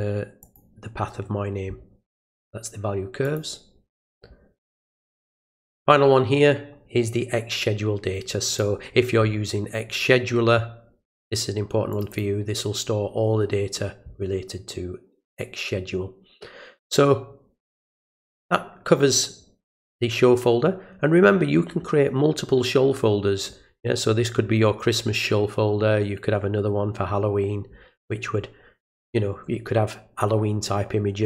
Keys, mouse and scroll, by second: 0.4 click, 3.2 click, 5.2 click, 5.4 click, 8.5 click, 11.9 click, 12.1 click, 15.3 click.